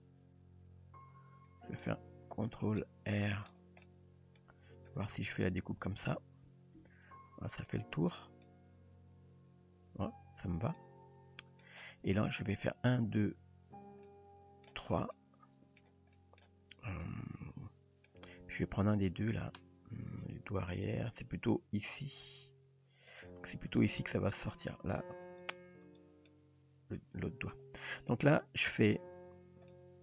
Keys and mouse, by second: 2.8-3.3 middle drag, 3.8-4.4 middle drag, 6.8 ctrl+r, 8.5-11.6 middle drag, 14.1-14.7 middle drag, 15.2-15.8 middle drag, 16.2 middle drag, 17.1-18.1 middle drag, 23.2 click, 23.8 click, 25.3 click, 25.8 click, 26.3-27.5 middle drag, 28.3-29.0 middle drag, 29.7-30.0 middle drag.